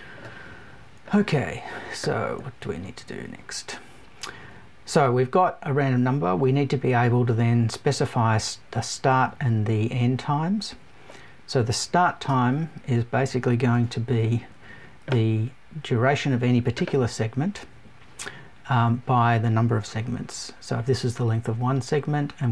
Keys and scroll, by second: 13.7 BackSpace.